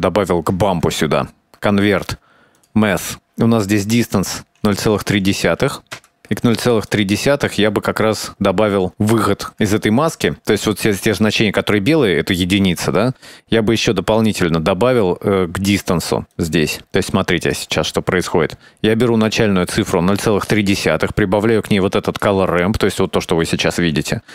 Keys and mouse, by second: 0.3 middle click, 0.9 shift+a, 3.5 middle click, 5.0 click, 6.1 middle click, 6.9 click, 7.6 middle click, 9.7 click, 10.6-11.7 ctrl+shift+drag, 14.4 click, 15.5-17.2 drag, 17.4 click, 18.2 middle click, 19.0 click, 20.6 middle click, 21.8 click.